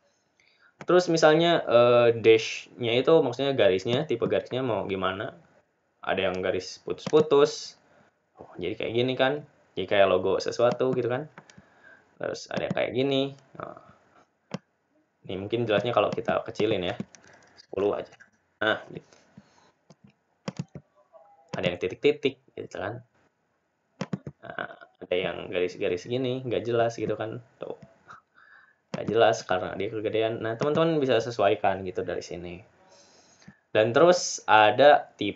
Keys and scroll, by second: 1.6-2.3 typing, 21.6-22.3 typing.